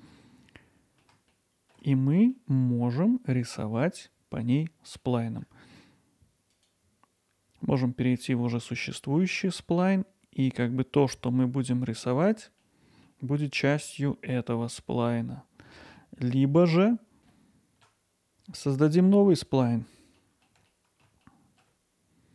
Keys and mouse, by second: 1.3-1.7 ctrl+alt+middle drag, 2.0 middle drag, 5.0-5.4 middle drag, 6.5-9.3 drag, 9.3 middle drag, 12.9 middle click, 15.2-15.9 middle drag, 20.2 middle drag.